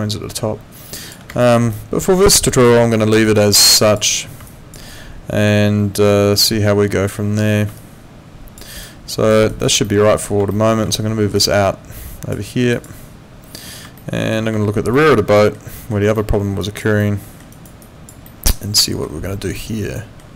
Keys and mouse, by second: 1.4 alt+middle click, 1.7 alt+click, 4.5 alt+click, 7.8 alt+click, 8.7 alt+right click, 9.8 alt+middle click, 10.5 alt+middle click, 11.4 click, 12.7 click, 14.0 alt+middle click, 14.9 alt+middle click, 16.6 alt+click, 17.0 alt+middle click, 17.5 alt+right click, 17.8 alt+click, 18.2 alt+middle click, 19.6 alt+middle click.